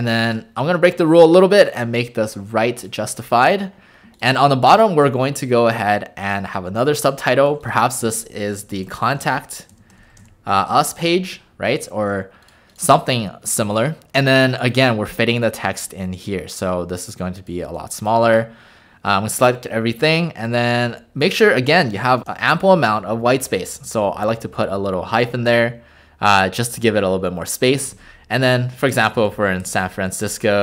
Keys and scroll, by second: 0.2 ctrl+a, 8.1 ctrl+alt+a, 8.7-11.0 typing, 18.3 ctrl+a, 20.9 -, 22.1 Return, 22.2 Return, 27.8-29.5 typing.